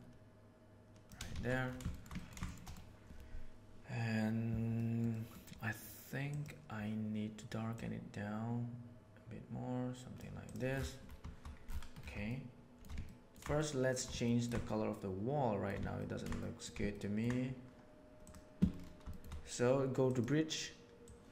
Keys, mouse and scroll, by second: 0.0-1.0 shift+middle drag, 1.3 alt+a, 1.6 shift+middle click, 2.1 middle click, 2.6 middle click, 4.7 middle click, 5.0 middle click, 6.2 click, 10.4 click, 12.2-12.7 shift+middle drag, 13.0 ctrl+middle click, 13.5-14.0 shift+middle drag, 14.3 ctrl+middle click, 14.8 shift+middle click, 15.9 ctrl+middle click, 16.3 shift+middle click, 16.8 ctrl+middle click, 18.2 click, 19.0 shift+middle click.